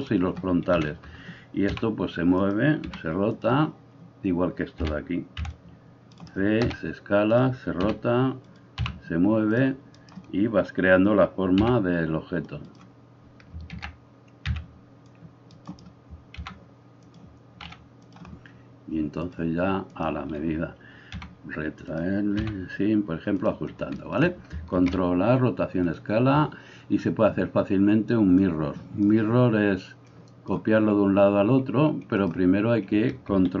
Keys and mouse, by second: 0.8 KP_1, 1.8 g, 2.8 r, 4.9 a, 5.4 c, 6.6 s, 7.9 r, 8.8 g, 10.0 right click, 10.9-19.3 middle drag, 11.6 g, 13.8 ctrl+z, 14.5 c, 16.3 g, 17.7 s, 19.3-22.0 drag, 21.2 r, 22.0-28.4 middle drag, 22.5 g, 24.7 ctrl+a, 28.4-33.6 drag.